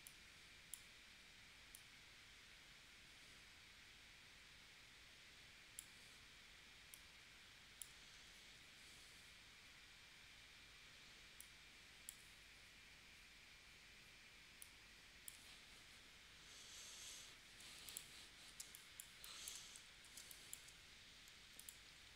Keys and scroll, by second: 8.1 super+z, 17.6 v, 18.6 space, 20.2 space.